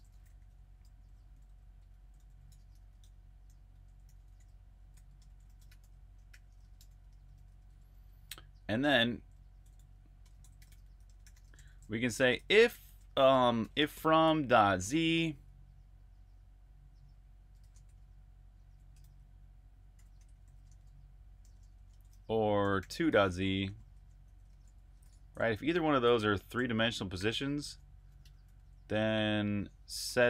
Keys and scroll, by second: 0.0-12.3 typing, 14.1-14.6 typing, 17.2-21.6 typing, 23.0 typing, 25.2-28.4 typing.